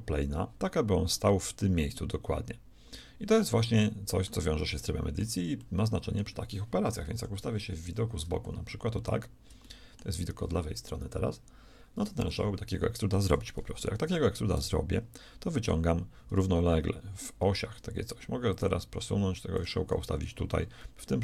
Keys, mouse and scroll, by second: 3.4-7.1 middle drag, 7.1 KP_3, 7.8 ctrl+KP_3, 9.0-10.8 middle drag, 14.5 e, 18.4-20.4 drag, 20.8 middle click.